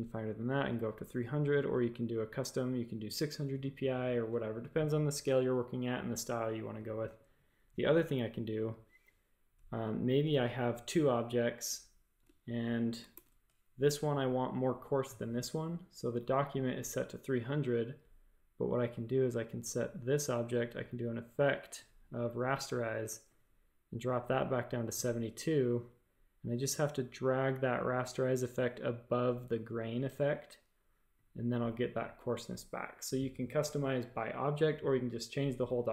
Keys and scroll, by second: 13.1 shift+super+a.